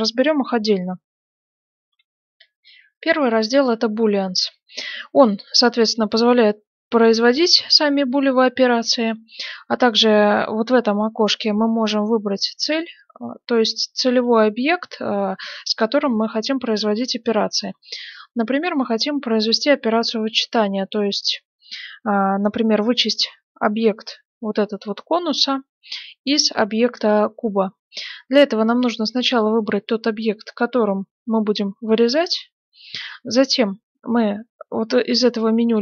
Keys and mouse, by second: 1.8 F9, 19.8-22.9 middle drag, 22.9-27.4 drag.